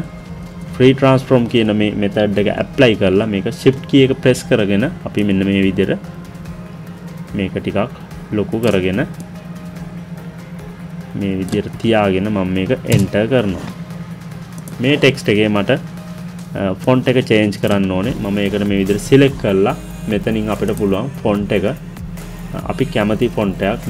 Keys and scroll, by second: 12.8 Return.